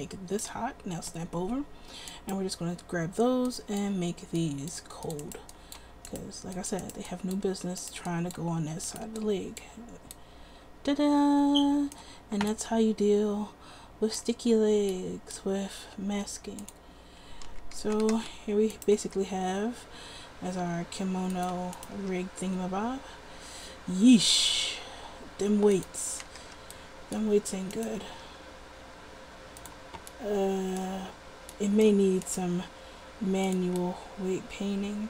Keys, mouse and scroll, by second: 3.6-10.7 middle drag, 11.2-11.6 middle drag, 12.0-13.2 middle drag, 14.2-15.3 middle drag, 17.7 a, 18.0 a, 18.3 alt+r, 19.2 r, 22.2 r, 26.1 a, 26.3 a, 26.5 alt+r, 28.4 r, 32.7 r.